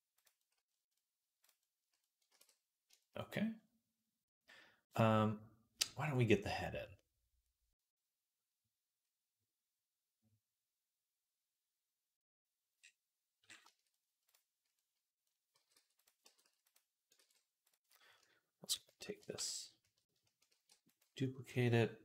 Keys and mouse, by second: 2.2 ctrl+s, 3.0 right click, 3.4-20.9 right drag, 15.4 g, 16.1 g, 17.0 ctrl+z, 17.5 click, 20.4 shift+d, 20.9-22.0 middle drag, 21.9 ..